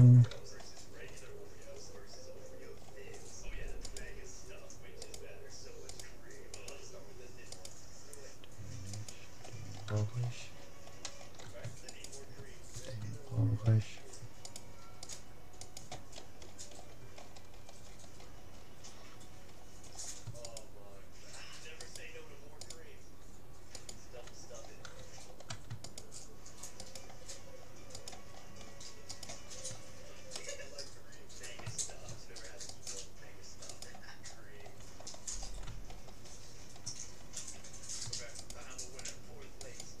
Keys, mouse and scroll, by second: 3.9-10.9 right drag, 9.7-11.7 middle drag, 11.9-13.7 right drag, 13.5 middle click, 14.5-17.3 right drag, 17.3-20.5 middle drag, 20.5-25.5 right drag, 24.7-25.9 middle drag, 25.3 click, 25.9 click, 25.9-30.6 right drag, 28.3-32.1 middle drag, 30.7 right click, 32.7-34.5 right drag, 35.5-38.5 middle drag, 38.5-40.0 right drag.